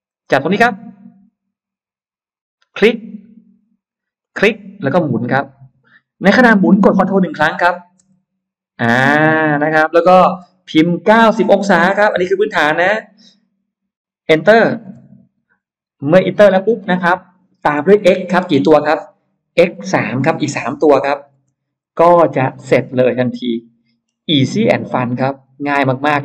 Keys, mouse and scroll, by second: 2.5 click, 4.1 click, 11.8 9, 12.7 0, 14.9 Return, 19.5 x, 20.1 3, 21.3 Return, 22.1 space, 22.4 scroll up 1, 22.9-23.9 middle drag, 25.1 click.